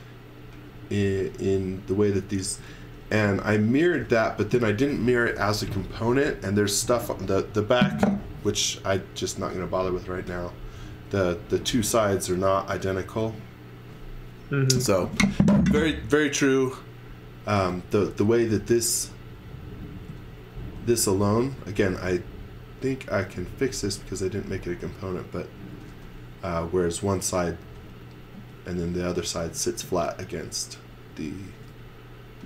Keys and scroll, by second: 1.1 space, 2.3-4.2 typing, 17.3-21.9 typing, 23.0 space, 23.8 b, 25.4-26.4 typing, 27.6 x, 28.3 space, 31.2-32.4 typing.